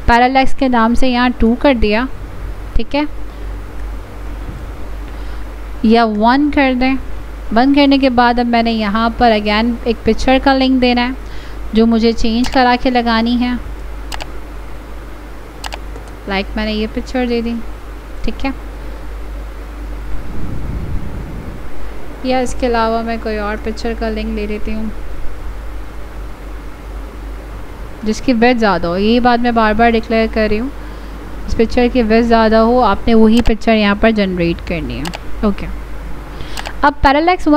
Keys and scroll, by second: 22.4 ctrl+z.